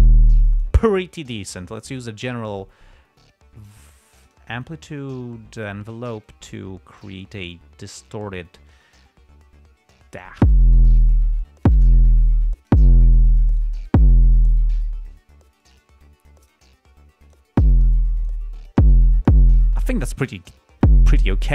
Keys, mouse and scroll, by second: 0.3 click, 1.8 click, 3.0-4.2 drag, 4.5-6.2 drag, 6.6 click, 7.8 click, 9.0-10.8 drag, 11.8-12.2 drag, 12.6 click, 13.6-14.1 drag, 16.0 click, 16.4-17.1 drag, 17.5 right click, 18.3-18.8 drag.